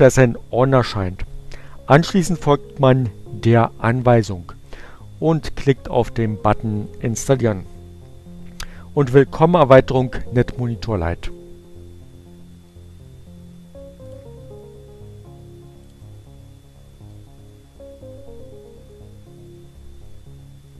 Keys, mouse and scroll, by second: 5.8-6.9 drag, 14.0 click, 15.3 click.